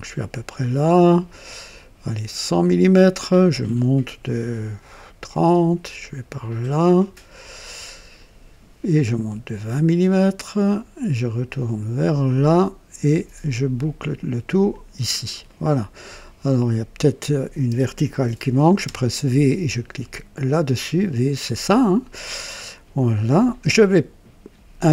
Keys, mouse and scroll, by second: 2.5 click, 5.3 click, 8.1 click, 10.3 click, 12.2 click, 14.7 click, 15.5 right click, 16.0 scroll up 1, 16.4 right click, 18.8 v, 20.3 click.